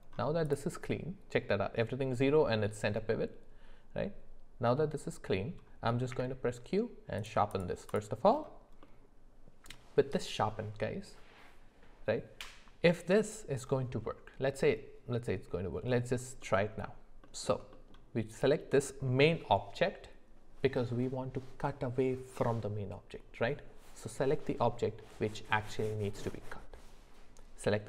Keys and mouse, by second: 3.1-5.3 middle drag, 6.1 q, 7.5 click, 8.8 middle click, 16.4 middle click, 17.2 shift+middle click, 17.7 middle click, 18.3 click.